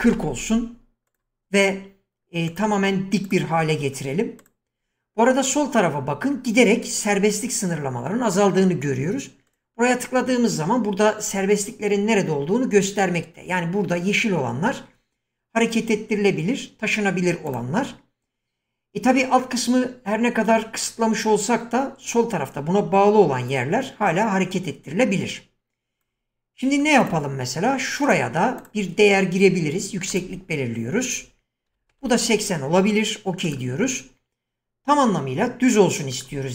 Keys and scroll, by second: 0.0-2.4 typing, 31.4-34.1 typing.